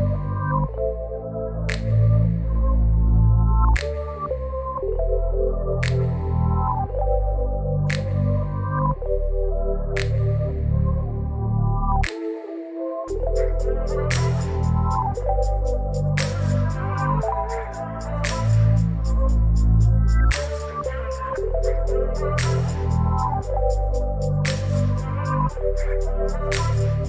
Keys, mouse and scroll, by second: 7.0 v, 8.8 ctrl+t, 10.7 shift+click, 20.4 ctrl+t, 23.3-27.0 drag.